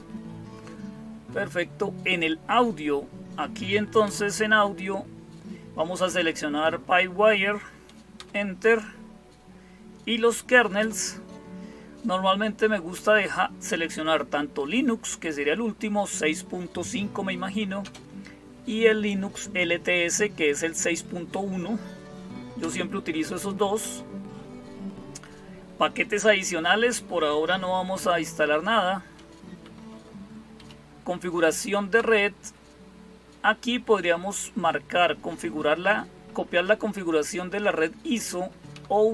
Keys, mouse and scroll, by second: 3.9 Return, 8.0 Return, 10.6 Return, 12.8 Down, 13.0 Down, 17.6 space, 22.4 Return, 29.5 Down, 29.7 Down, 30.4 Up, 31.8 Return, 38.5 Down.